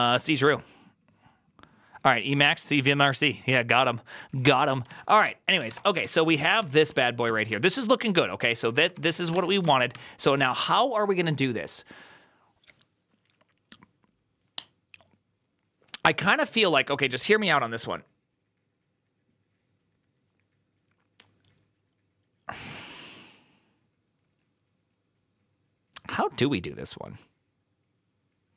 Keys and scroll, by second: 5.1 alt+{, 5.1 ctrl+c, 5.2-6.1 typing, 6.2 ctrl+u, 6.8 ctrl+u, 7.1 ctrl+u, 8.4 ctrl+d, 8.5 ctrl+d, 8.6 ctrl+d, 9.0-10.8 typing.